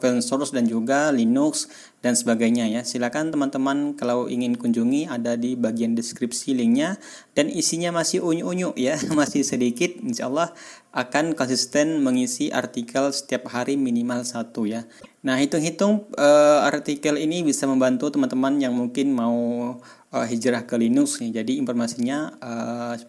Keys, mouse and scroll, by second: 1.9-3.8 scroll down 8, 7.0-7.6 scroll up 4, 9.7-10.1 scroll up 2, 10.5 scroll up 2, 11.0 scroll up 2, 20.6-20.9 scroll down 2, 22.2-22.5 scroll up 2.